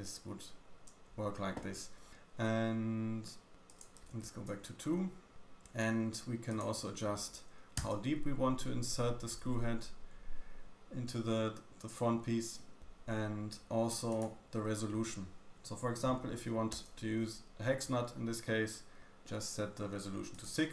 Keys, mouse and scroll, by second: 0.0-1.2 scroll up 1, 3.6 click, 6.4 click, 14.0 click, 18.4 middle click, 20.2 click.